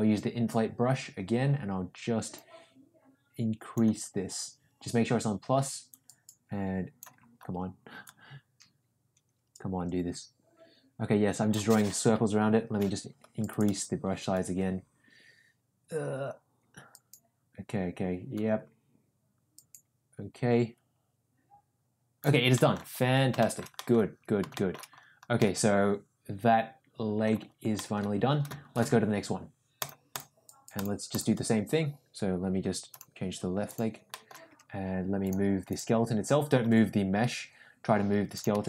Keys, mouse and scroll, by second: 2.3-3.7 drag, 5.9-6.9 drag, 8.0-11.5 drag, 12.0 ], 12.6 ], 12.6 ], 12.7 ], 13.4-22.2 drag, 22.5 middle click, 23.3 shift+middle click, 23.7 middle click, 24.5 shift+middle click, 25.3-27.2 middle drag, 27.7 middle click, 29.7-30.1 drag, 30.7 click, 32.9 click, 33.6 click, 34.0 middle click, 36.6 g.